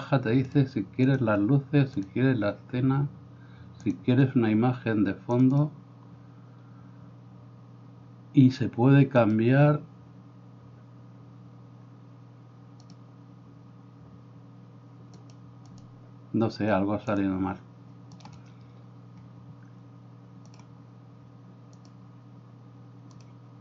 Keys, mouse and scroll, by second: 9.3-15.5 drag, 18.2-20.7 drag, 21.9-23.6 drag.